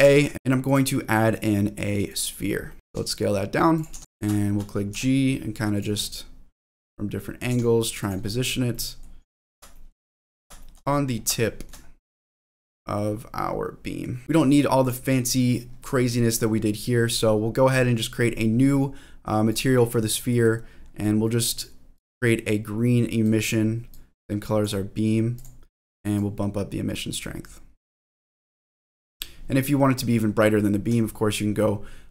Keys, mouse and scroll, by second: 2.7 middle click, 2.9 click, 2.9-3.7 scroll down 1, 2.9 g, 2.9 s, 3.7 click, 3.9 s, 4.0-4.9 scroll up 5, 4.4 shift+middle click, 4.9 g, 5.7 click, 6.0-7.2 middle drag, 7.5 g, 8.0 click, 8.2-8.7 scroll up 3, 8.7 middle click, 9.2-9.5 scroll down 3, 9.7 shift+middle click, 10.1 scroll down 2, 10.6 shift+middle click, 10.9-12.6 scroll up 7, 11.5 shift+middle click, 12.4-14.0 middle drag, 14.3 middle click, 14.8 click, 15.9-16.7 scroll down 2, 17.1 click, 19.5 click, 20.3 middle click, 20.6-21.2 scroll up 3, 21.2 middle click, 21.9 click, 25.3 click, 26.1-32.1 drag.